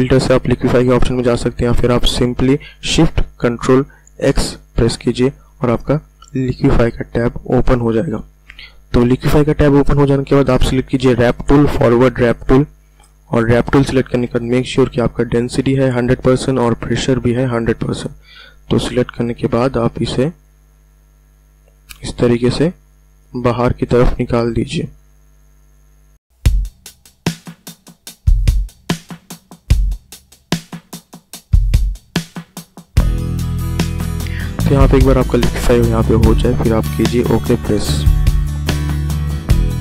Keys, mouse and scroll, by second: 4.2 ctrl+shift+x, 19.1 click, 28.8-30.7 typing, 29.1 click, 29.8 click, 30.8-34.9 drag, 37.5 click.